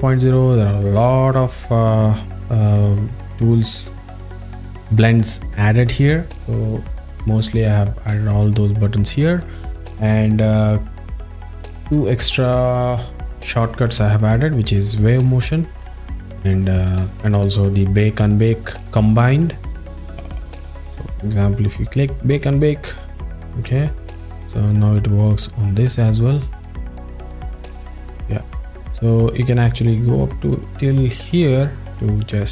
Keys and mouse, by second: 2.7 alt+middle click, 3.7-6.5 drag, 7.8 alt+middle click, 22.6 click, 23.3 a, 23.7 click, 24.3 a, 26.3 click.